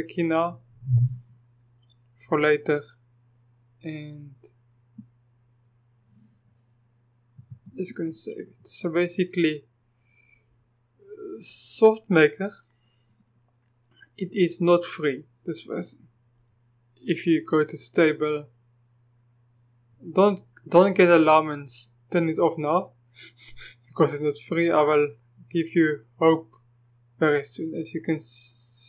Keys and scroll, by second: 7.4 ctrl+v.